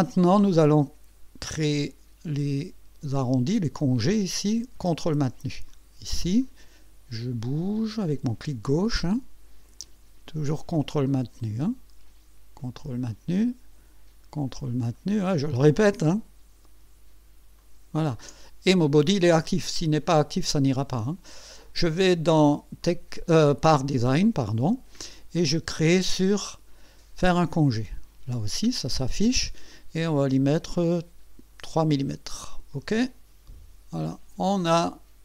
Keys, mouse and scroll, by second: 0.3 scroll up 1, 3.1 click, 5.7 ctrl+click, 6.4-8.4 ctrl+drag, 11.0 ctrl+click, 13.4 ctrl+click, 14.9 ctrl+click, 17.6 ctrl+click, 22.0 click, 22.4 click, 22.8 click, 23.4 click, 27.3 click, 30.2 scroll up 2, 31.2 scroll up 1, 32.7 click, 34.0 click.